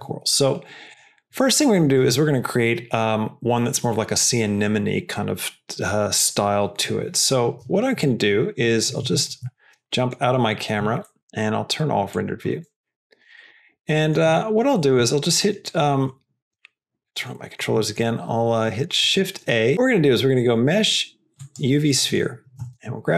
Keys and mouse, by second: 0.8 click, 8.9 q, 9.8 middle click, 11.0 middle click, 12.1 click, 12.7 shift+middle click, 13.2 shift+middle click, 13.8 middle click, 14.2 shift+middle click, 14.7 middle click, 15.6 click, 16.0 shift+middle click, 16.9 click, 17.3 middle click, 17.7 shift+middle click, 18.6 shift+middle click, 18.9 shift+a, 21.8 middle click, 22.5 g.